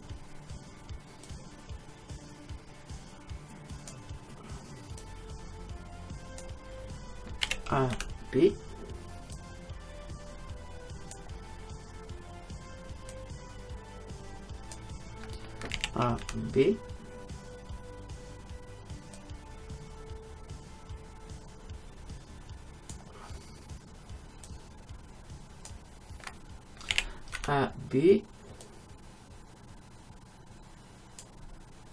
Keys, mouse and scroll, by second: 5.0-6.9 drag, 7.5 a, 8.0 b, 13.1-15.1 drag, 15.8 a, 16.3 b, 24.5-26.5 drag, 27.0 a, 27.4 b.